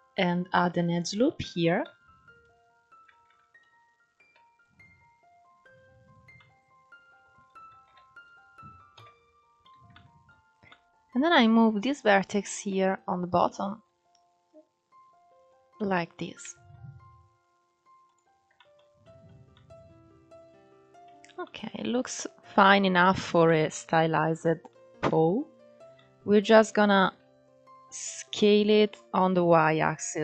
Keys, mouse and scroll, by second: 1.5 alt+z, 2.1 click, 2.8 alt+z, 3.3 click, 4.5 scroll down 6, 5.0-5.4 scroll up 6, 5.7 scroll up 1, 6.0-7.3 middle drag, 7.3 ctrl+1, 7.9 click, 8.6 KP_1, 9.6 shift+middle click, 10.1 scroll up 1, 10.3 scroll down 1, 10.3 middle click, 11.0-11.5 scroll up 3, 12.2 KP_1, 13.3 g, 15.5 scroll down 4, 16.2 Tab, 16.9-17.7 scroll down 2, 17.7 click, 18.2-18.8 shift+middle drag, 18.8-19.2 scroll down 1, 19.2-20.7 middle drag, 20.7-21.1 scroll up 3, 21.1-23.8 middle drag, 23.8-24.4 scroll up 3, 24.4-25.1 middle drag, 25.1 Tab, 25.6-26.7 middle drag, 26.7 alt+z, 27.1 click.